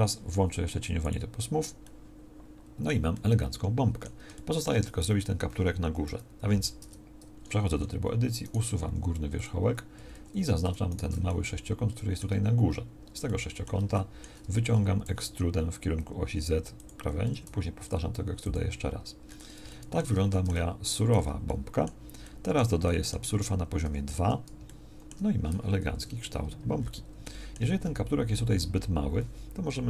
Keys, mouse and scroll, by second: 0.0 t, 6.0 KP_1, 6.8 Tab, 8.8 x, 10.2 a, 10.4 a, 14.8 e, 17.2 e, 21.2 Tab, 23.8 ctrl+2, 25.9 KP_1.